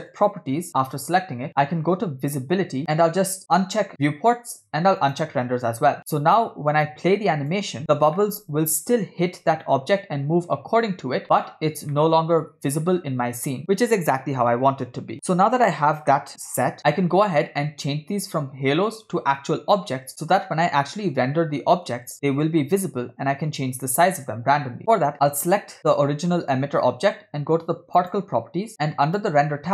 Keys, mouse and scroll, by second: 0.2 click, 2.8 click, 2.8-3.4 scroll down 5, 3.5 click, 5.1 click, 6.0-7.6 drag, 7.6 space, 8.2-9.0 middle drag, 9.7 middle click, 11.9-12.9 middle drag, 16.8 space, 17.6-18.3 scroll up 2, 19.1 scroll down 2, 20.1 click, 25.1 click, 28.0 click, 28.7-29.1 scroll down 5, 29.1 click, 29.6-29.7 scroll down 2.